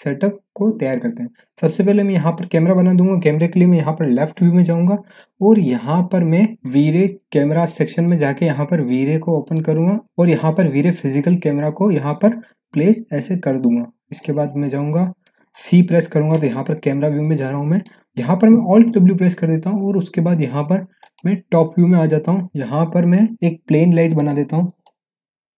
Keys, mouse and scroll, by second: 1.4 scroll up 1, 1.6-2.5 middle drag, 3.7 l, 4.7 scroll up 1, 5.1-5.7 middle drag, 6.6-14.3 drag, 15.0 scroll down 1, 15.2-15.8 alt+middle click, 16.4 c, 16.9-17.4 scroll down 1, 17.4-18.0 middle drag, 18.7 alt+w, 20.3-21.0 scroll down 1, 21.0 click, 22.4 w, 24.1-25.5 drag.